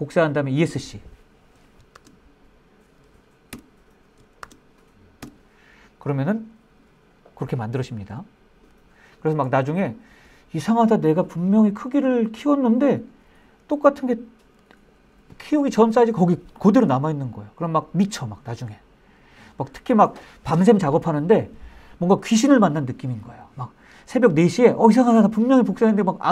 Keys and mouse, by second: 1.2 shift+d, 2.9 Escape, 3.7 shift+d, 4.5 Escape.